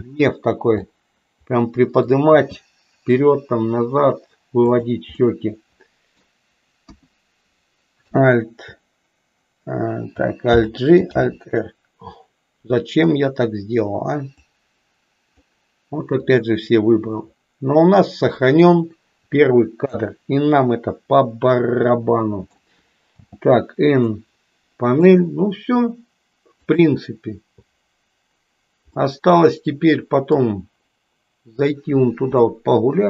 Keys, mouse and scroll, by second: 1.0-2.2 middle drag, 2.4 g, 5.4 middle click, 6.9 KP_1, 8.0 a, 8.5 a, 10.5 alt+g, 11.2 alt+r, 14.4-15.5 drag, 16.3-18.7 drag, 21.8 middle click, 24.0-25.1 middle drag, 27.4 click, 29.0-30.5 middle drag, 32.5-33.0 middle drag.